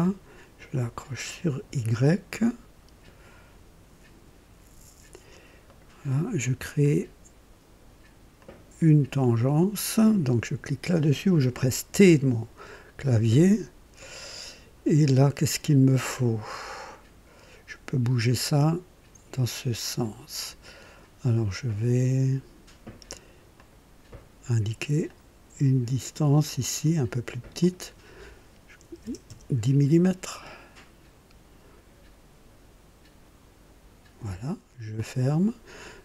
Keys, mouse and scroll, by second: 1.4 click, 5.6 right click, 6.7 click, 8.3 click, 11.8 t, 16.6-20.5 drag, 23.4 click, 24.9 click, 26.3 click, 27.5 click, 28.7 KP_1, 28.9 KP_0, 29.2 Return, 34.8 click.